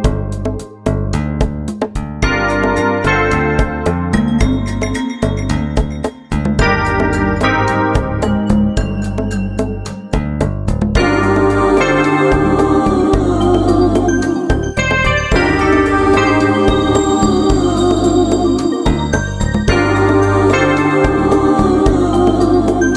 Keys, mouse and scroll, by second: 0.6 KP_1, 0.8 middle click, 1.0 middle click, 1.3 right click, 1.6 ctrl+Tab, 1.8 middle click, 2.1 click, 2.1 right click, 2.3 KP_1, 2.5 click, 2.9 middle click, 3.0 click, 3.0 right click, 3.2 KP_1, 3.5 click, 3.8 middle click, 4.2 click, 4.3 KP_1, 4.5 click, 5.0 click, 5.0 middle click, 5.2 KP_1, 5.5 click, 6.0 middle click, 6.5 right click, 6.7 KP_1, 6.9 click, 7.5 right click, 7.6 KP_1, 8.0 click, 8.1-11.0 middle drag, 9.0 click, 9.2 right click, 9.5 click, 9.8 right click, 9.8 KP_1, 10.7 right click, 11.1 x, 11.4 middle click, 11.6 right click, 11.7 x, 11.9 middle click, 12.0 right click, 12.2 KP_1, 12.4 middle click, 12.6 right click, 13.2 click, 13.5 middle click, 13.8 right click, 13.9 click, 14.2 KP_1, 14.5 click, 17.0 KP_1, 17.6-19.1 drag, 20.1 right click, 20.4 x, 20.7 KP_1, 21.6 middle click, 22.4 middle click.